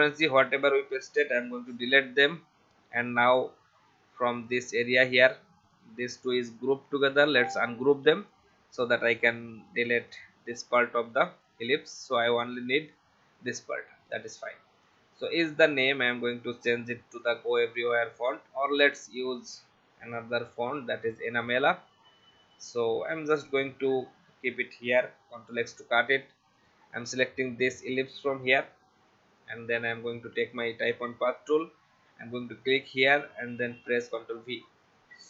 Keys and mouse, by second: 0.2 ctrl+a, 1.0 Delete, 3.0 click, 4.4 click, 6.3 right click, 7.5 click, 9.7 click, 10.4 Delete, 11.7 click, 12.9 click, 14.8 click, 15.7 right click, 17.2 click, 19.1 click, 19.9 e, 20.3 n, 21.0 click, 22.4 click, 25.2 ctrl+x, 26.6 click, 29.4 click, 30.5 click, 32.6 click, 33.7 ctrl+v, 35.1 click.